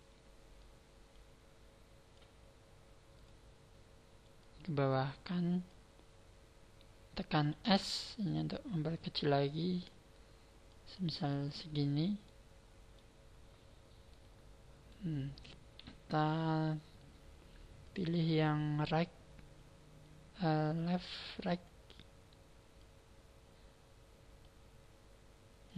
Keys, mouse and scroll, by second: 0.5 click, 3.3 click, 4.4 click, 7.7 s, 9.8 click, 10.7 click, 12.2 middle click, 14.1 middle click, 17.8 click, 22.7 click.